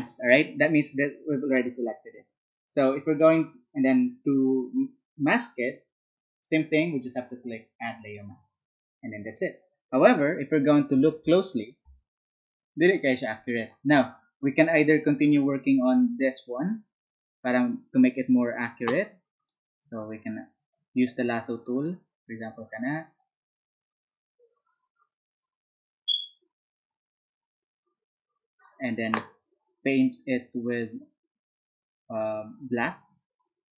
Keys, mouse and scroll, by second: 17.9 space.